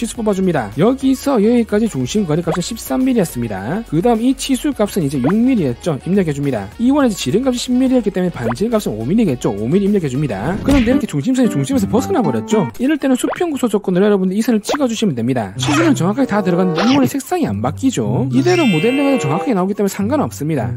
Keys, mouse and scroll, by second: 0.3 d, 0.9 click, 2.0 click, 2.5 click, 2.8-3.6 typing, 4.2 click, 4.7 click, 5.2 click, 6.8 d, 7.7 click, 8.4 click, 10.2 5, 13.2 ctrl+right click, 14.1 right click, 15.2 right click, 17.6 right click.